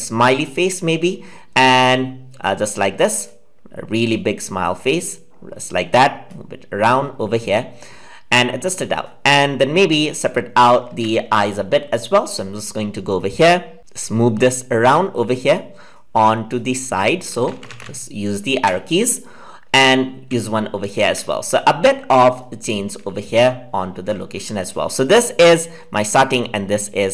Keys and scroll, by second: 10.8 ctrl+z.